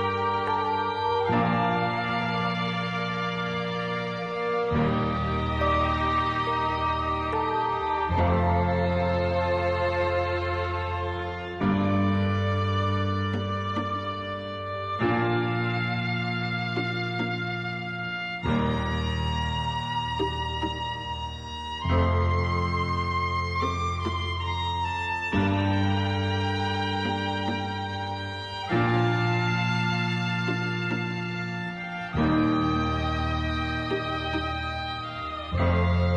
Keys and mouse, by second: 2.1-3.7 drag, 4.2 click, 6.5 g, 8.8 g, 10.4 click, 10.6-11.8 drag, 14.3 shift+middle click, 14.8 click, 15.3-17.8 drag, 18.4 ctrl+z, 20.5-22.1 drag, 23.1-24.7 drag, 25.6 click, 27.9 shift+middle click, 30.4 shift+middle click, 31.5 shift+middle click, 33.3 shift+middle click, 33.9 shift+middle click, 35.6-36.1 drag.